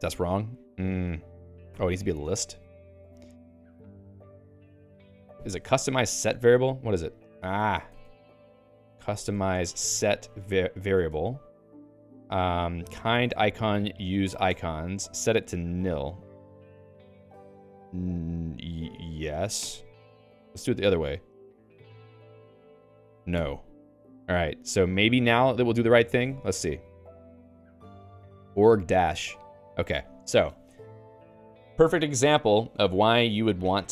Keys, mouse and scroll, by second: 1.6 click, 1.8 q, 2.4 alt+:, 2.6 Up, 3.0 Right, 7.8 ctrl+g, 8.6 alt+x, 8.8-10.3 typing, 10.6 ctrl+j, 11.1 Return, 12.6-14.1 typing, 14.2 ctrl+j, 14.6 Return, 19.6 y, 20.5 alt+x, 21.1 Return, 22.1 Return, 23.4 n, 24.8 j, 25.4 k, 29.2 -.